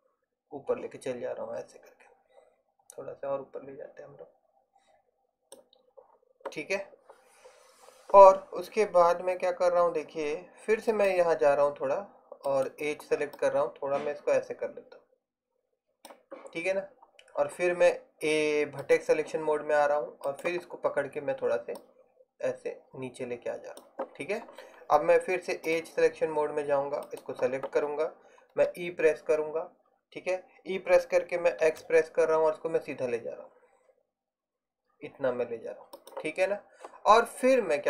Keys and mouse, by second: 12.6-14.7 right drag, 20.3-22.1 right drag, 28.6 e.